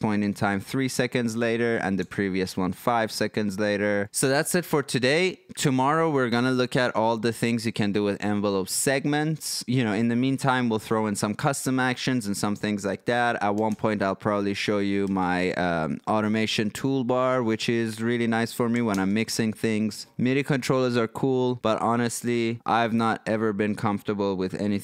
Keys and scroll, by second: 0.2 3, 0.9 Tab, 2.0 5, 13.7 ctrl+5, 15.2 ctrl+4, 19.0 ctrl+4.